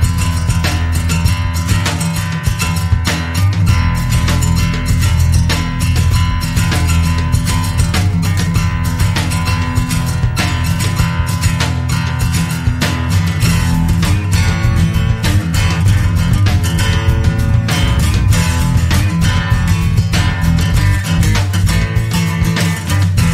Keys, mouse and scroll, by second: 0.7 scroll down 1, 1.1 click, 7.4 click, 8.1 click, 11.5 click, 12.0 click, 15.6 click, 17.6 click, 19.5 click, 20.4 click, 21.7 click, 22.2 click.